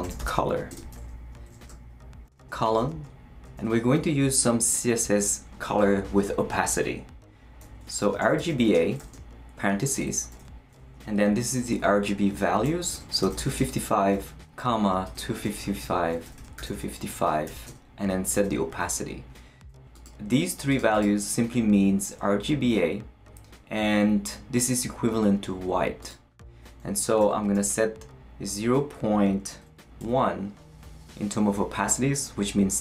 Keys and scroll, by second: 0.0-0.8 typing, 1.7 shift+Return, 2.2 shift+;, 2.8 shift+space, 3.5 shift+', 7.8-9.5 typing, 9.9 shift+Left, 10.3 Right, 12.7-17.7 typing, 27.2 0, 27.5 ., 30.0 l.